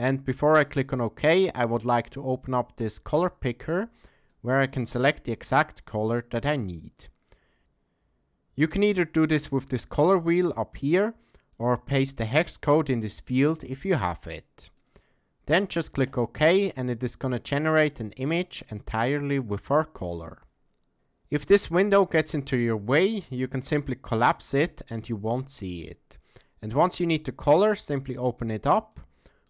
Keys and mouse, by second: 23.0 click, 28.0 click.